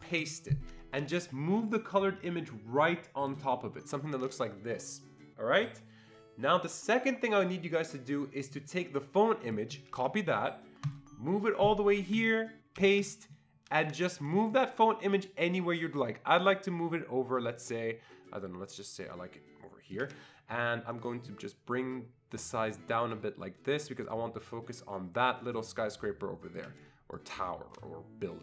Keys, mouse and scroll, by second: 0.1 ctrl+v, 1.6-6.6 drag, 8.4-9.5 drag, 9.5 click, 9.9 ctrl+c, 10.9 click, 12.8 ctrl+v, 14.5-28.4 shift+drag, 26.7 click, 27.1-28.4 shift+drag.